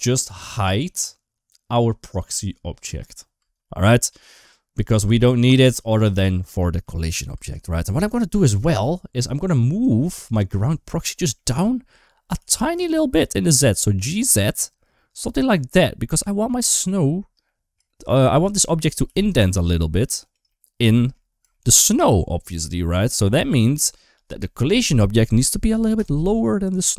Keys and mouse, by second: 2.1-3.2 drag, 3.2 space, 4.9 space, 6.5 click, 6.7 space, 7.2 space, 10.8 middle click, 12.2 g, 17.3 middle click, 17.7 shift+middle click, 18.0 shift+middle click, 18.4 middle click, 18.9 g, 20.3 middle click, 20.8 shift+middle click, 21.4 shift+middle click, 23.0 middle click.